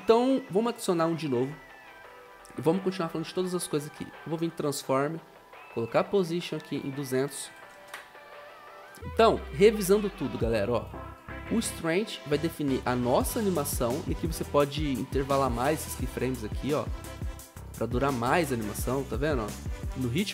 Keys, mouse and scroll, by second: 7.5-8.3 typing, 18.3 0.